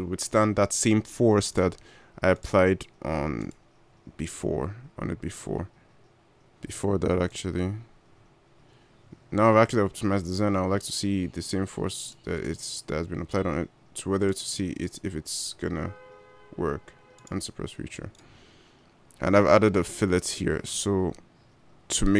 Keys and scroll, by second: 4.6 g.